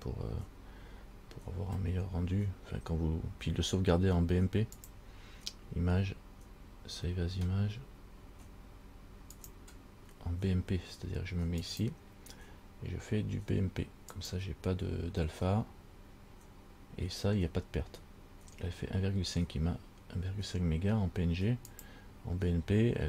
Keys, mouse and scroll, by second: 4.9 click, 22.1 click.